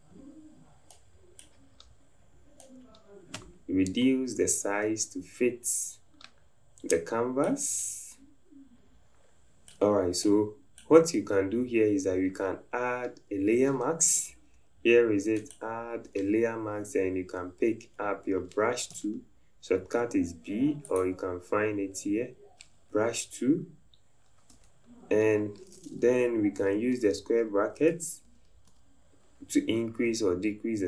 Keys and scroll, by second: 19.0 b, 24.5 Caps_Lock, 26.6 ], 26.9 ], 28.4-29.2 typing.